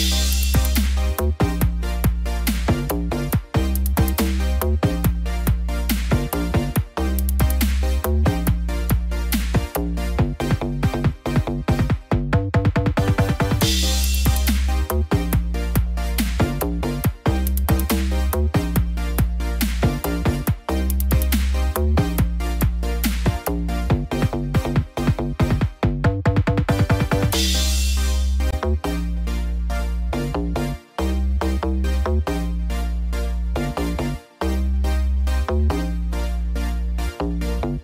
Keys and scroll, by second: 0.8 ctrl+d, 2.4 ctrl+-, 3.0 ctrl+0, 10.4 ctrl+=, 14.6 ctrl+=, 28.6 ctrl+-, 29.1 ctrl+0.